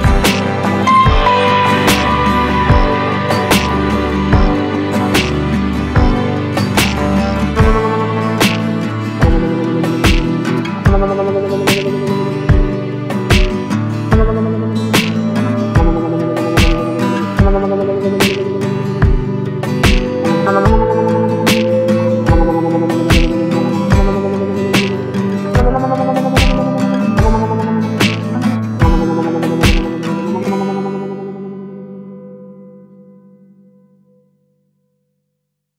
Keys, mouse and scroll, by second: 1.1 right click, 2.1 click, 4.5-12.3 drag, 17.5-25.8 drag, 25.8 ctrl+alt+scroll up 1, 33.8 ctrl+alt+Num_Lock, 33.8-34.3 ctrl+alt+scroll down 1.